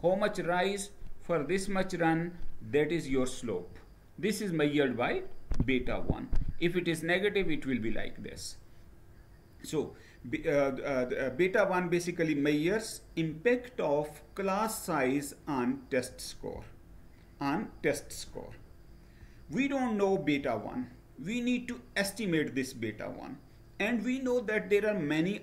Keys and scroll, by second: 18.8 Down.